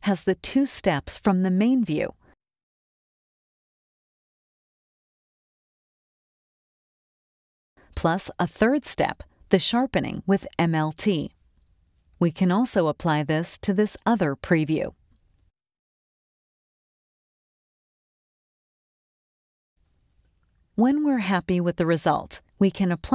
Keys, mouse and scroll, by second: 0.5 click, 1.5 right click, 2.7 click, 6.5 click, 7.5 right click, 8.7 click, 10.5 click, 15.1 click, 17.2 click, 20.9-23.1 drag.